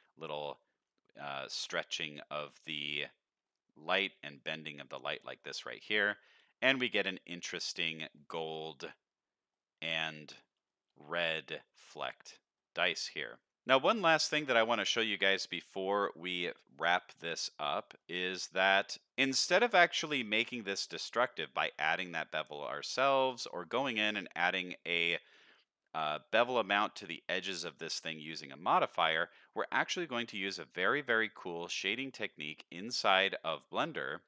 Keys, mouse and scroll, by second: 0.0-0.5 middle drag, 1.2 middle click, 3.0-3.4 middle drag, 5.0 middle click, 5.3-5.6 scroll down 2, 6.0 scroll down 2, 6.1 alt+a, 6.3-6.8 middle drag, 7.1-8.1 middle drag, 8.3-9.6 scroll up 2, 8.7-9.6 middle drag, 9.8-10.4 middle drag, 10.6 shift+middle drag, 11.1-11.7 middle drag, 11.7 scroll up 1, 11.9-12.5 middle drag, 12.9 scroll up 2, 13.4 shift+middle drag, 14.0-14.5 middle drag, 14.8-15.2 middle drag, 15.4-15.8 scroll up 2, 15.8-16.2 middle drag, 16.5 scroll up 2, 17.1-17.7 middle drag, 18.0 shift+middle drag, 19.1 middle drag, 19.1 scroll down 3, 19.7 middle drag, 20.8 shift+middle drag, 23.4-24.1 middle drag, 27.7 middle click, 28.7 shift+middle drag, 29.2 middle click, 29.7 middle click, 30.2 middle click, 30.6 click, 31.1 middle drag, 32.0 shift+middle drag, 33.1 shift+middle drag, 33.6 middle click, 34.0 shift+middle drag.